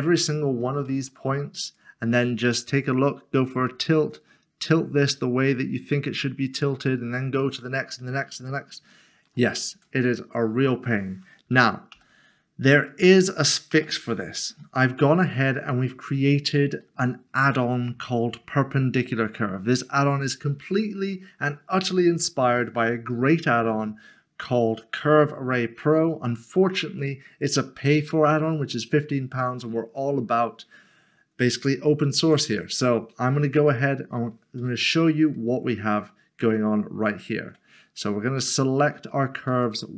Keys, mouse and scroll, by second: 0.9 middle click, 1.7 click, 8.9 shift+middle click, 9.7 Tab, 11.9 Delete, 12.9 click, 13.7 Delete, 14.6 middle click, 20.7 click, 32.2 click, 33.5 Tab, 33.7 click, 34.6 1, 35.8-36.4 scroll down 1, 36.4 1, 37.1 1, 38.7 ctrl+click.